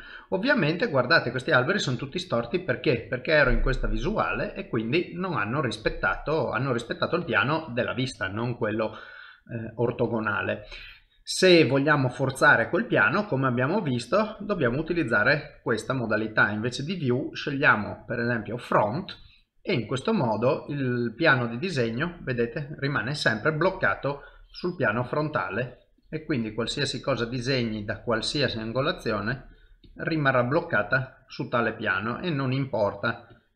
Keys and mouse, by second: 1.5 middle click, 2.7 middle click, 11.3 middle click, 14.6 click, 20.2 middle click, 24.3-27.0 click, 27.0 middle click, 28.5 click, 30.0 click, 30.2 middle click, 33.3 click.